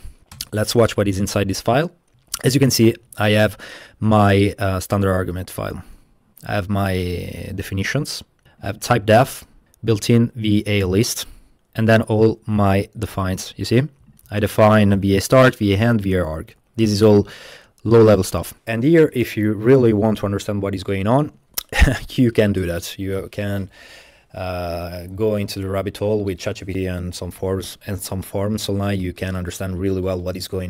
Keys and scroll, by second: 0.4 Return, 2.2 super+-, 3.0 super+-, 3.6 super+-.